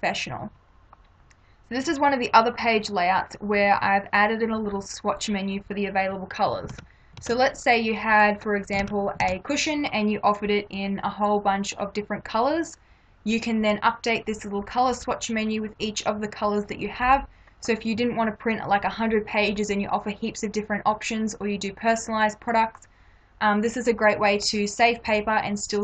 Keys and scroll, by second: 6.8 ctrl+=, 8.8 ctrl+=.